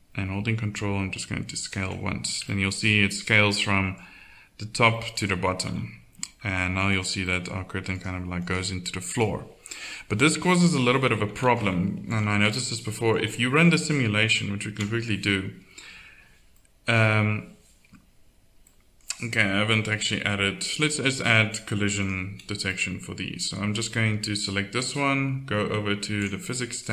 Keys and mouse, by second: 2.0 middle click, 5.6 KP_1, 10.2 Tab, 10.8 z, 11.2 KP_1, 12.4 Tab, 14.6 alt+a, 22.8-23.8 middle drag, 23.9-25.8 drag.